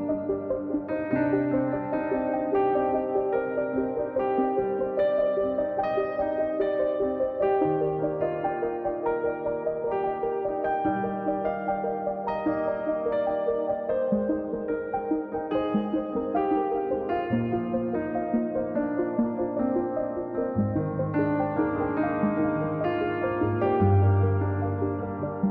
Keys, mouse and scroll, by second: 2.1-3.3 drag, 4.3 click, 4.9-5.5 scroll down 3, 5.9 click, 6.3-6.6 scroll up 2, 6.6-9.3 drag, 11.2-12.4 drag, 16.3-19.3 drag, 20.8-25.3 drag, 25.3 scroll down 3, 25.4-25.5 scroll up 3.